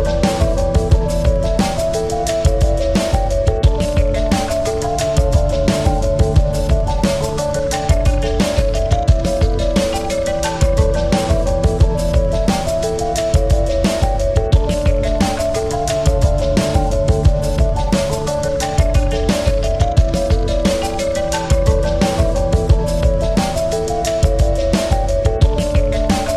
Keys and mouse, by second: 0.1 ctrl+c, 0.9 ctrl+f, 2.8 click, 4.6 click, 5.7-7.8 alt+shift+drag, 7.9 right click, 7.9 right click, 9.8 click, 12.9 click, 13.1 ctrl+-, 13.6 ctrl+-, 16.2 click, 17.4 click, 20.5 click, 22.2 click, 22.4-23.9 alt+shift+drag, 24.0-25.6 drag, 26.0 click.